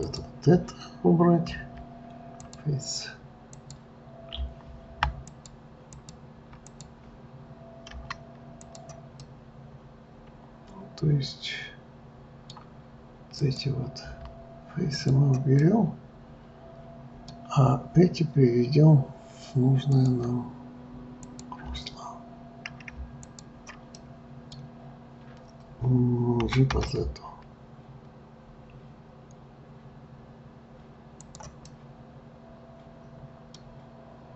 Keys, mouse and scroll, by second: 0.1 click, 1.5 Delete, 3.6 click, 5.2 alt+click, 6.0 alt+click, 6.7 click, 8.0 Delete, 9.2-12.2 middle drag, 13.4 click, 14.1 Delete, 15.6-18.8 middle drag, 19.9-21.4 drag, 23.3 shift+click, 23.9-26.5 middle drag, 26.5 g, 31.7-34.3 middle drag.